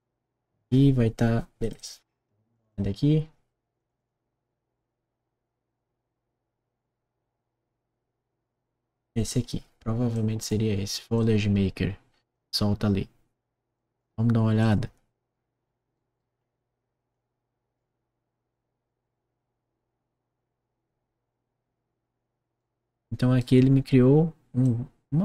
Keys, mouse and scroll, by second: 1.6 click, 1.7 click, 2.4 click, 2.6 click, 3.7 click, 3.9 click, 10.1 click, 11.1-12.2 drag, 15.2 middle click, 15.2-15.7 scroll down 1, 15.8 click, 16.3 middle click, 16.3 scroll down 1, 17.0 click, 22.5 right click, 22.9 click, 23.6 scroll down 1, 24.6-25.2 drag.